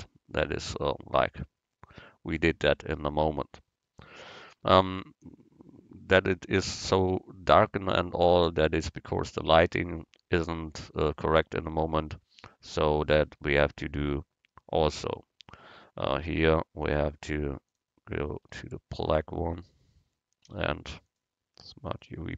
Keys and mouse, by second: 8.9-10.8 drag, 15.0-18.7 right drag, 18.6 Tab, 20.5 u.